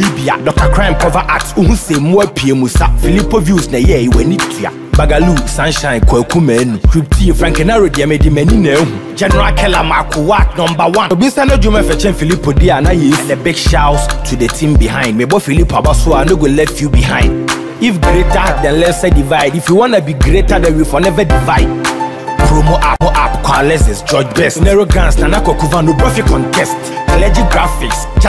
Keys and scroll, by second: 8.9 ctrl+z, 19.0 Up.